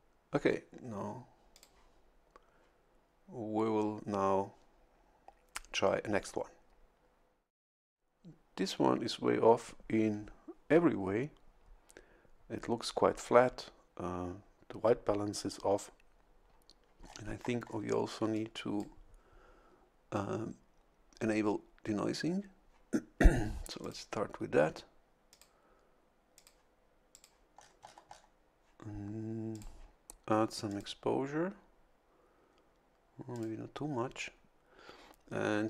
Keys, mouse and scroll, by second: 1.5 click, 17.0-17.9 scroll up 1, 18.3 click, 23.8 click, 25.3 click, 26.3 click, 27.1 click, 27.5 scroll down 1, 28.0 scroll up 1, 29.5 click, 30.7 click, 33.3 click.